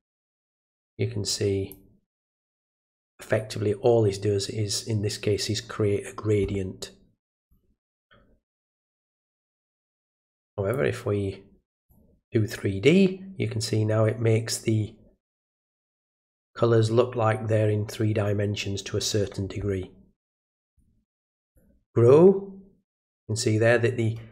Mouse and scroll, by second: 1.3 click, 7.4 click, 10.1 click, 11.7 click, 20.6 click, 21.4 click.